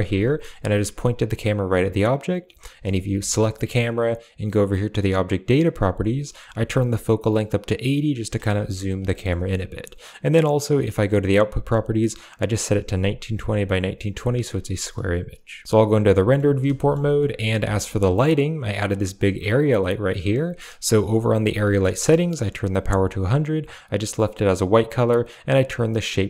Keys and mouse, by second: 2.0 click, 3.0 g, 3.3 click, 4.9 click, 5.5 click, 6.6-8.1 shift+drag, 9.0 shift+middle click, 10.5 click, 14.8 click, 15.6 z, 16.0 middle drag, 16.6 shift+middle click, 17.0 middle drag, 19.4 click, 19.9 click, 23.8 click, 25.6 click.